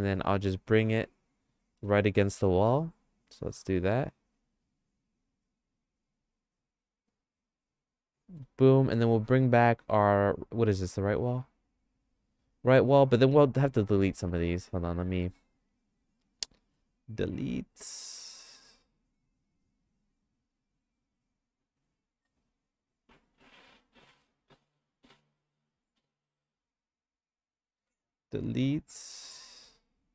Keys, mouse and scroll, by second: 1.8 g, 4.9-7.4 shift+middle drag, 9.7 click, 11.6 click, 14.5 click, 16.6 x, 19.6 click, 21.5 click, 23.3 click, 27.0 click, 27.8 x, 29.4 middle click.